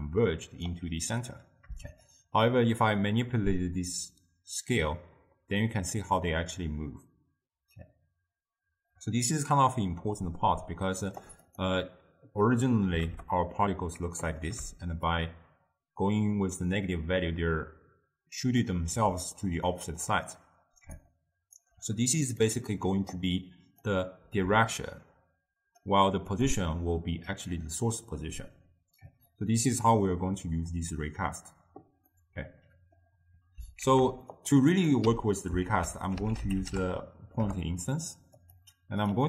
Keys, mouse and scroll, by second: 2.3-5.2 shift+drag, 13.1-18.3 drag, 19.5-21.0 drag, 21.0-25.9 right drag, 25.9-35.1 drag, 35.1 m, 37.5 ctrl+a.